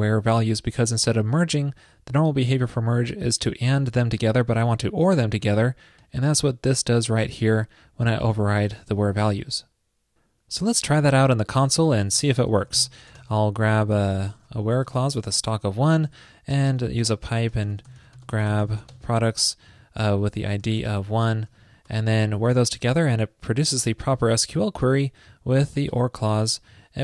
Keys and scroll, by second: 9.3 super+s.